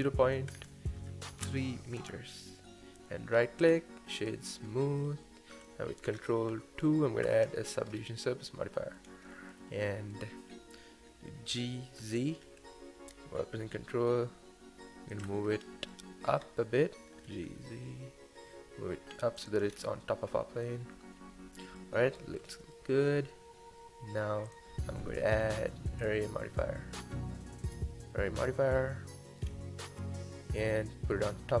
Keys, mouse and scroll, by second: 2.4-3.6 middle drag, 3.6-4.7 right drag, 4.7-7.2 middle drag, 7.2 ctrl+2, 7.9-8.2 scroll up 3, 8.2-11.4 middle drag, 11.4 g, 15.4 scroll up 2, 15.9-16.4 middle drag, 16.4 scroll down 2, 16.6-17.2 scroll up 1, 17.2 g, 19.7-20.0 scroll down 3, 20.0-24.5 middle drag, 24.5 click, 26.0-29.0 drag, 29.4-31.6 scroll down 1.